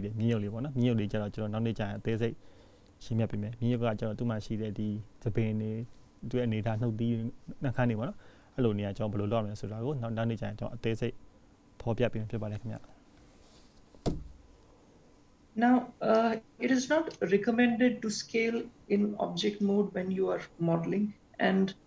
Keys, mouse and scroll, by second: 0.5 click.